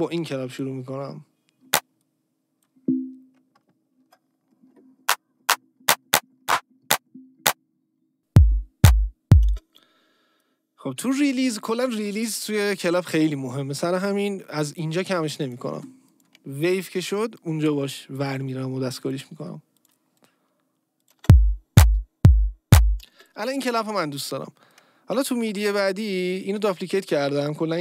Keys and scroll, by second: 4.0 ctrl+shift+m, 9.5 space, 21.2 space, 23.1 space.